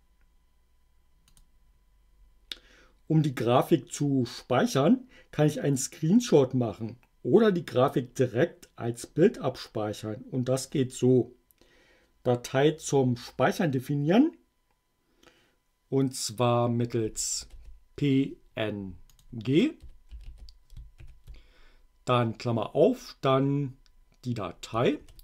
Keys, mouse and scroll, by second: 1.4 click, 16.8-18.1 typing, 19.2 click, 19.6-21.0 typing.